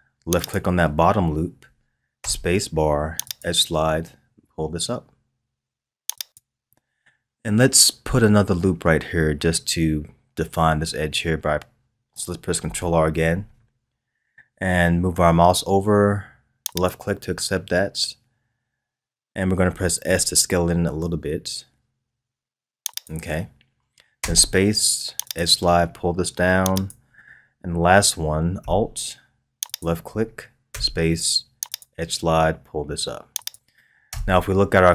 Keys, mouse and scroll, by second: 0.4 alt+click, 2.2 space, 13.1 ctrl+r, 24.2 space, 29.6 alt+click, 30.7 space, 34.1 Tab.